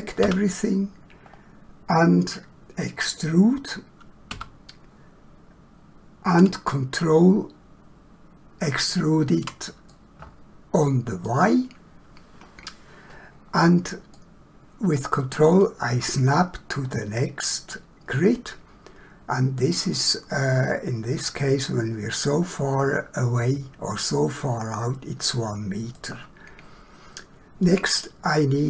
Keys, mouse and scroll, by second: 0.2 a, 1.2 scroll down 1, 4.3 e, 8.8 ctrl+click, 9.9 middle click, 14.1 middle click, 17.7 middle click, 24.1 middle click.